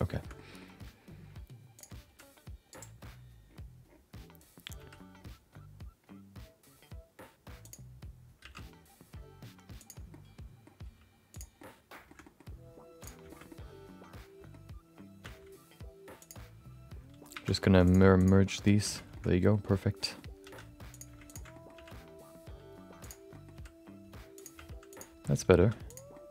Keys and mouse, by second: 0.2 shift+middle click, 0.3 middle click, 1.7 click, 2.1 r, 4.7 r, 8.4 g, 10.2 middle click, 10.8 g, 11.7 middle click, 12.1 middle click, 13.0 click, 13.3 shift+middle click, 13.4-14.5 middle drag, 15.2 x, 17.3 1, 17.8 click, 18.2 shift+click, 18.8 shift+x, 19.4 middle click, 20.0 middle click, 20.4 3, 20.9 click, 21.2 ctrl+shift+click, 21.5 middle click, 21.7 g, 23.4 middle click, 23.5 r, 24.5 g, 25.6 2, 25.9 click, 26.1 middle click.